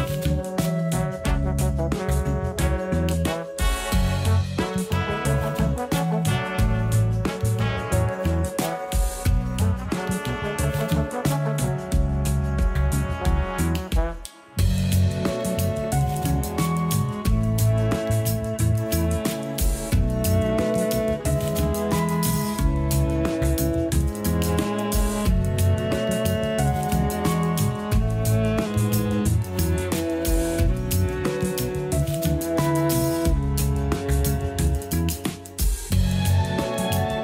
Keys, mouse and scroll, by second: 0.4 shift+click, 0.8 scroll up 1, 1.2 g, 3.6 scroll down 2, 3.9 a, 4.1 a, 4.4 Tab, 4.7-5.3 scroll up 2, 5.3 a, 5.5 a, 6.1 shift+middle click, 6.8 click, 7.9 g, 9.8 scroll up 1, 10.1 g, 13.0-13.6 scroll down 4, 13.6 scroll up 1, 14.0 g, 15.8 Tab, 16.6 3, 16.8 click, 16.9 click, 17.5 alt+s, 19.0 a, 19.2 a, 19.3-20.0 scroll down 3, 19.5 Tab, 20.0 a, 20.2 a, 20.4 scroll down 1, 21.0-22.4 scroll up 4, 22.4-23.7 scroll down 3, 23.7-24.2 scroll down 6, 24.5-28.3 scroll up 11, 28.3 scroll down 2, 30.5-32.0 shift+middle drag, 32.0-32.8 scroll down 7, 32.8-36.0 shift+middle drag, 36.0 click.